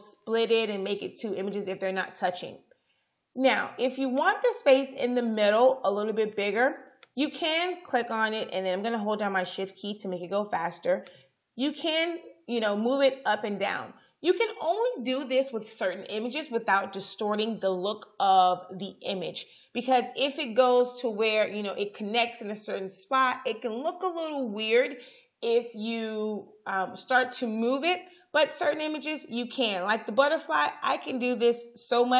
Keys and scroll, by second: 9.6 shift+Down, 12.0 shift+Up.